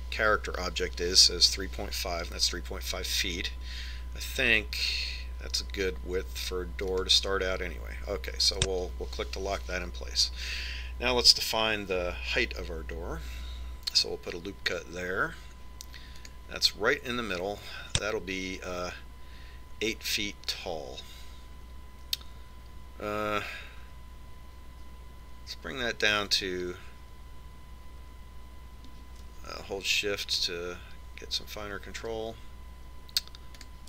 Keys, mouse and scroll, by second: 15.0 ctrl+r.